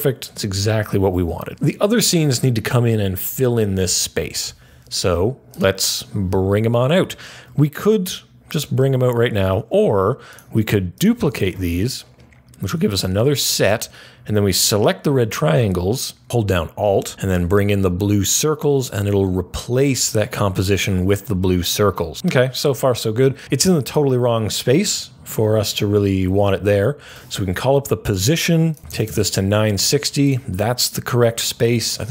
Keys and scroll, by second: 11.3 super+d, 26.6 p, 28.5-29.8 typing.